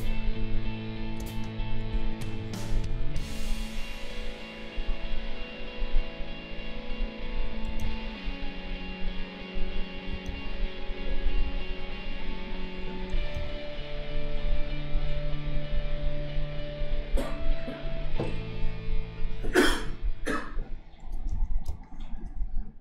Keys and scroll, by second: 1.2 space, 7.8 ctrl+z, 10.2 ctrl+z, 13.3 ctrl+z, 21.3 ctrl+z, 21.6 space.